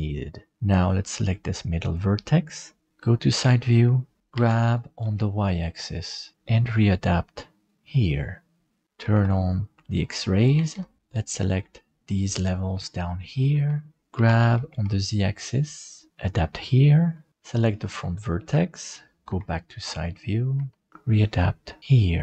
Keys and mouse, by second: 0.5 middle click, 1.8 right click, 3.3 shift+middle click, 4.3 g, 9.0 alt+z, 10.6 alt+a, 11.0 c, 14.1 g, 17.2 middle click, 17.5 right click, 19.3 KP_3, 20.5 g.